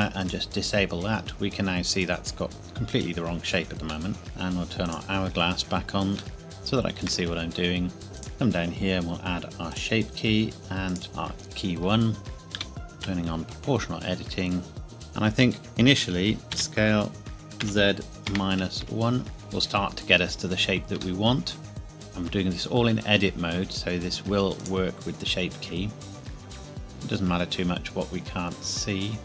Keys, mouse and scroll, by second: 0.2 click, 2.1 scroll up 1, 4.1 middle click, 4.8 click, 6.4 shift+middle click, 8.0 Tab, 8.2 click, 11.7 Tab, 12.2 o, 12.5 g, 13.0 z, 13.6-14.8 scroll down 1, 14.8 a, 16.5 s, 17.6 z, 18.3 KP_Subtract, 18.8 KP_1, 19.4 KP_Enter, 20.0-21.0 scroll down 1, 21.2 shift+middle click, 21.9 z, 24.6 click, 26.4-26.8 scroll up 2, 26.5 KP_1, 26.8 scroll down 1, 27.1 scroll up 1, 28.2 scroll up 1.